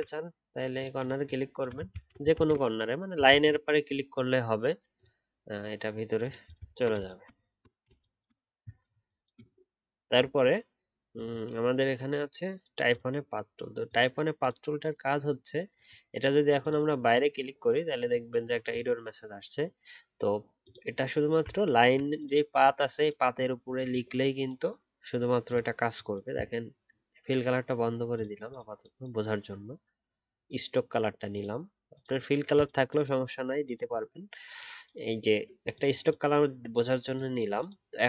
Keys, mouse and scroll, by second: 1.9 ctrl+z, 2.3 ctrl+z, 3.3 ctrl+z, 6.6-7.0 alt+scroll down 1, 7.4-8.6 alt+scroll down 1, 21.6 alt+scroll up 1.